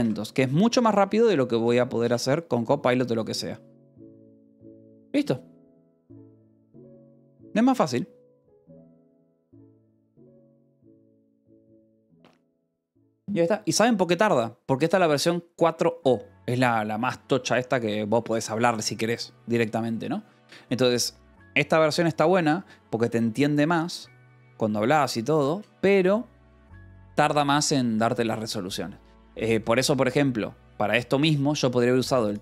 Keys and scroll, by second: 0.0-0.5 typing, 2.0 Return.